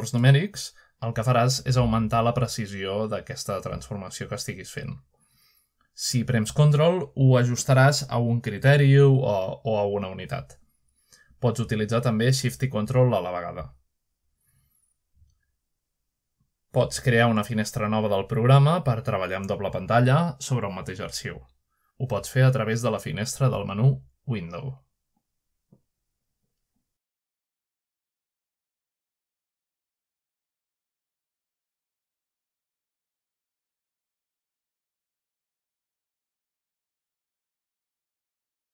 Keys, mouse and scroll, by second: 0.1-0.5 scroll down 1, 0.4 middle click, 1.9 click, 5.2 typing, 5.5-21.6 shift+drag, 22.3 middle click, 22.9 click, 23.8 middle click, 26.4-27.0 drag, 27.5 click, 28.1 Return, 28.1-29.3 drag, 28.1 2, 28.1 *, 28.1 5, 30.8-31.5 drag, 31.5-32.3 scroll down 1, 32.3-32.9 scroll down 1, 32.9 click, 34.1 click, 36.9 alt+click.